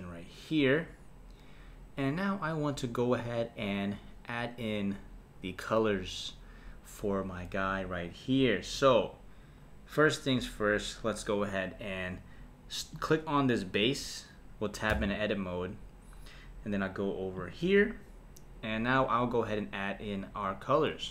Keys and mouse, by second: 0.0 click, 12.9 click, 14.9 Tab, 17.4 click.